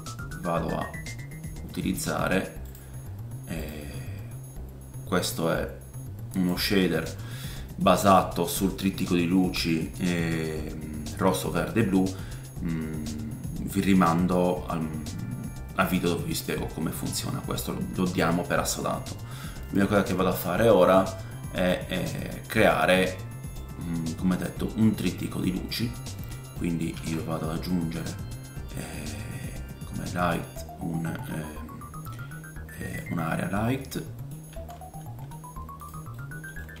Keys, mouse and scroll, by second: 3.9 scroll up 1, 5.2-15.9 middle drag, 7.1-8.1 scroll up 3, 15.9-20.5 drag, 20.3-20.6 scroll down 3, 22.1 click, 22.7 middle click, 26.9 shift+a, 29.4-35.8 drag, 33.2-33.5 scroll down 2, 33.6 middle click, 34.0 middle click, 34.5 g, 35.8-36.8 right drag, 36.1 middle click.